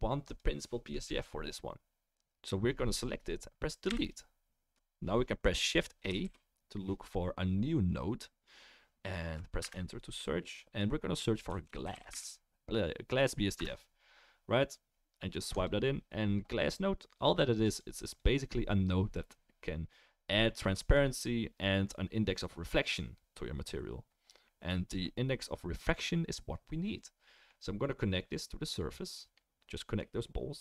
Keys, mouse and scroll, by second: 0.3 click, 3.8 Delete, 3.8-17.2 right drag, 6.2 shift+a, 12.1 s, 17.2-17.7 drag, 18.3-28.5 drag.